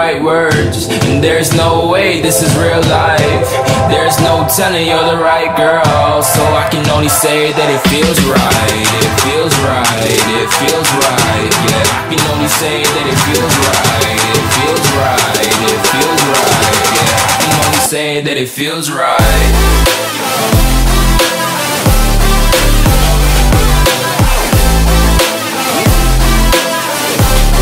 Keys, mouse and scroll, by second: 4.7 shift+click, 5.7 ctrl+c, 6.0 ctrl+v, 6.5-9.3 drag, 13.7 ctrl+v, 14.1-16.3 drag, 19.7 F10, 20.1-22.6 drag, 21.2-23.1 typing, 25.1 Up, 25.3 Return, 26.2 click, 26.6 click.